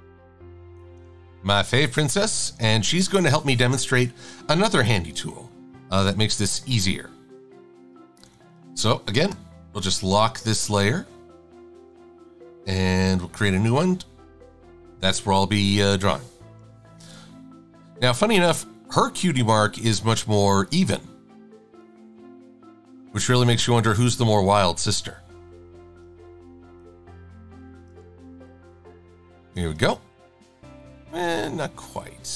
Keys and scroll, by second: 8.2 super+=, 8.4 super+=, 15.5 d, 16.7 /, 26.5 a, 31.4 v.